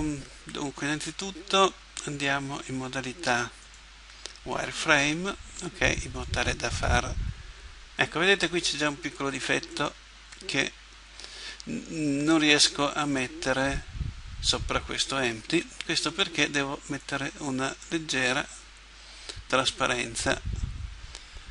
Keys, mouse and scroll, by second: 3.6-5.5 drag, 6.2-7.9 drag, 16.9-18.7 drag, 18.5-20.5 right drag.